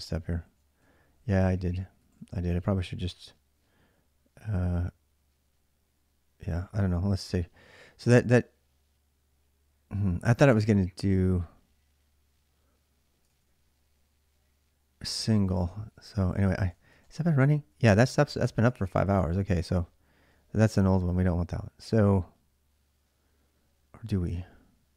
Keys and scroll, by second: 0.2 ctrl+a, 1.1 ctrl+a, 1.3 ctrl+a, 1.8 ctrl+a, 2.0 ctrl+a, 13.1 ctrl+a, 13.3 ctrl+a, 15.3 ctrl+a, 16.0-18.6 typing.